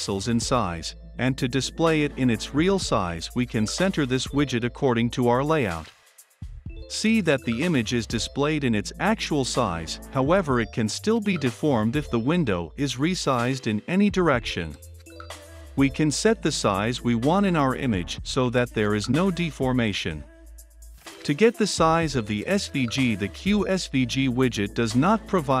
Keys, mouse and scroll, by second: 0.0-4.0 typing, 4.1 Return, 4.7 click, 5.1 ctrl+F5, 8.5-21.2 drag, 21.0-25.6 typing.